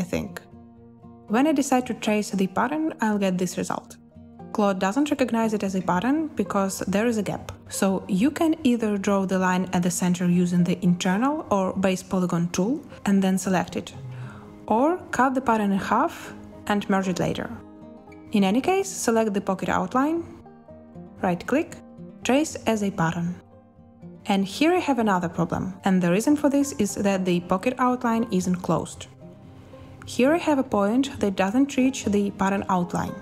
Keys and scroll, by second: 8.3 Escape, 12.7 z, 18.4 i, 25.8 Escape, 29.0 z.